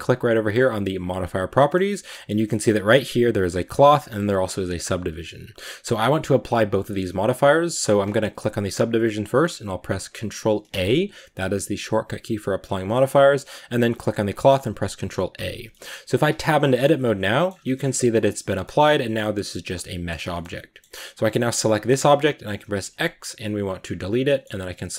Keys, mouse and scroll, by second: 2.2-10.6 drag, 10.6 ctrl+a, 13.3-15.2 drag, 15.2 ctrl+a, 15.7-16.2 middle drag, 16.2 Tab, 16.5-16.9 middle drag, 16.9 scroll up 1, 17.1 middle drag, 17.3 scroll down 2, 17.5 shift+middle click, 17.6 shift+scroll up 3, 17.8 a, 18.0 middle click, 18.3 scroll down 2, 18.5 middle click, 19.3 Tab, 19.4-21.0 middle drag, 21.0 right click, 21.6-23.7 middle drag, 23.7 x, 23.9 scroll down 4, 24.1-24.6 middle drag, 24.6 right click.